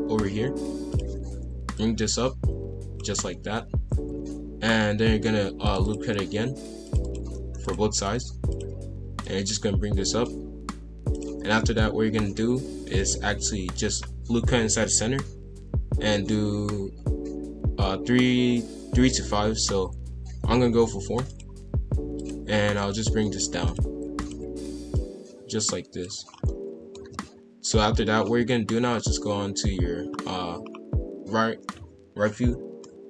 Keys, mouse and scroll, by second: 0.9 click, 3.8 ctrl+r, 6.3 ctrl+r, 7.6 click, 8.5 shift+click, 9.2 click, 11.1 click, 11.6-13.2 shift+middle drag, 13.2 ctrl+r, 22.1 click, 22.7 click, 23.6 click, 24.2 shift+click, 26.3 scroll down 1, 26.4 middle click, 26.9 KP_5, 27.1 KP_1, 27.7 KP_3, 28.1-28.8 scroll up 3, 28.8-30.1 scroll down 1, 30.1-30.6 scroll down 3, 30.6-32.8 scroll up 2, 32.8 middle click.